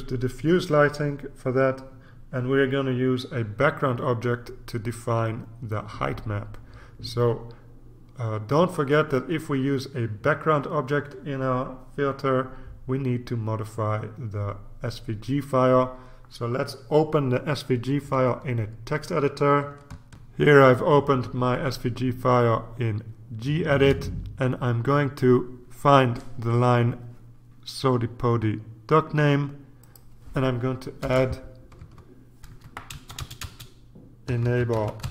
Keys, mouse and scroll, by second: 20.3 ctrl+r, 29.8 click, 31.0 Return, 31.8 Tab, 32.5-35.1 typing.